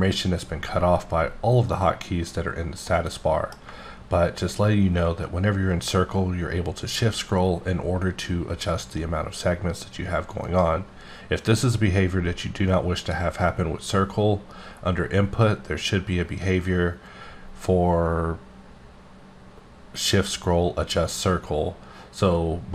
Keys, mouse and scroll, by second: 2.9 middle click, 3.9 scroll up 2, 4.3-4.8 shift+scroll down 6, 5.0-6.0 shift+scroll up 8, 6.4-6.8 shift+scroll down 4, 6.8 shift+scroll, 7.2 shift+scroll up 3, 7.5-7.9 shift+scroll, 7.9-9.1 shift+scroll up 8, 10.4 right click, 13.0 click.